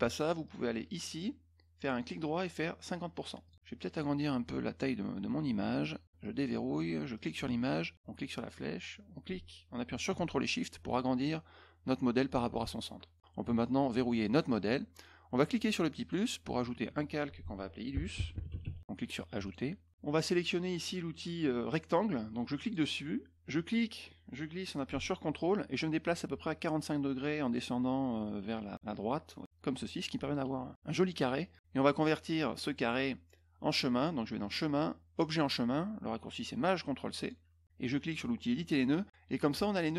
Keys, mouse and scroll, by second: 0.4 click, 1.9 right click, 3.4 click, 3.9 click, 6.3 click, 7.1 click, 8.5-13.1 drag, 14.3 click, 15.9 click, 17.6-18.9 typing, 19.4 click, 22.5 click, 23.5-30.3 drag, 34.4 click, 37.1 click, 38.5 click.